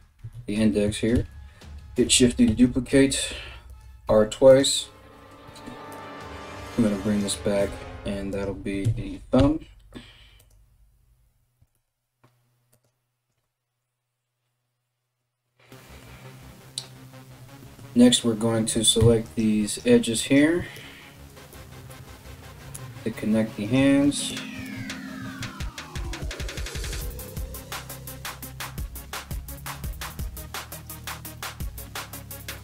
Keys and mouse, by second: 0.0-0.8 typing, 2.1 r, 3.7 r, 5.1 r, 5.8 g, 7.5 g, 8.4 KP_3, 9.0 g, 11.2 r, 18.6 2, 18.9 right click, 19.3 right click, 20.9 right click, 21.5 f, 22.0-23.4 right drag, 22.3 f, 23.4 shift+middle click, 23.6 shift+right click, 23.8-29.7 shift+middle drag, 24.5 ctrl+s, 25.0 ctrl+z, 25.8 shift+right click, 26.5 f, 27.7 right click, 28.2 f, 29.7 right click, 29.8 shift+middle click, 30.3 shift+right click, 30.5-31.8 shift+middle drag, 31.0 f, 31.8 right click, 32.1-32.6 middle drag, 32.3 f.